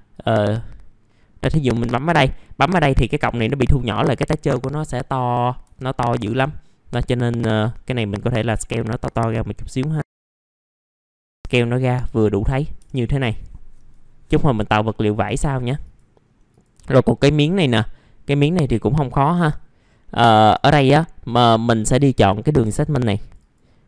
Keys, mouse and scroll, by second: 2.3 middle click, 3.0-3.4 scroll up 1, 7.7 click, 8.9-9.8 scroll down 1, 9.8 click, 10.2 click, 10.7 click, 10.7 scroll up 1, 10.8 click, 11.3 scroll up 1, 11.4 middle click, 11.5 scroll down 1, 12.9 ctrl+shift+g, 12.9 scroll, 13.0-14.2 scroll up 1, 14.2 F4, 14.6-15.2 scroll down 1, 15.2 right click, 15.9 click, 16.4 scroll down 1, 16.8 alt+middle click, 17.6 scroll up 1, 17.9 click, 18.5 right click, 20.4 click, 20.8 F4, 21.2 scroll up 1, 21.5 middle click, 22.7 click, 23.5-23.8 scroll up 1.